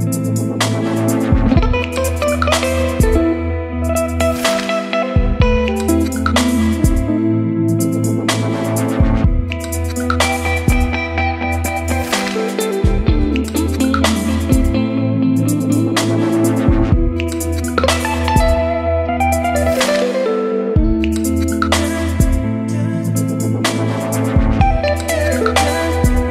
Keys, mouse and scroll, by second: 1.6-2.9 drag, 2.9 l, 3.0 a, 3.2 n, 4.5 b, 4.7 d, 4.8 a, 5.4 Return, 6.1-11.6 typing, 12.3 Down, 13.4-16.6 drag, 16.6-18.5 right drag, 18.5-20.6 drag, 20.6 >, 20.8 s, 20.9 e, 21.2 t, 23.7 shift+t, 23.8 e, 24.0 x.